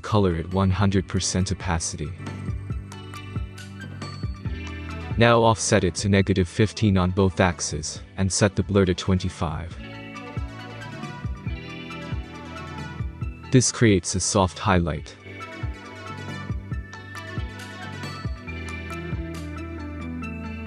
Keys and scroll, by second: 5.2-6.7 typing, 7.7 Tab, 8.5-9.8 typing, 11.1-11.6 typing, 12.2 Return.